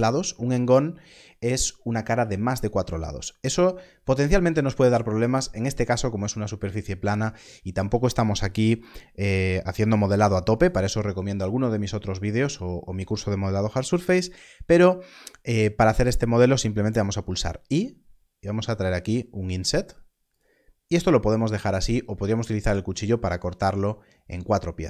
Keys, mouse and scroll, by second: 17.5 3, 20.2 i, 20.3 click.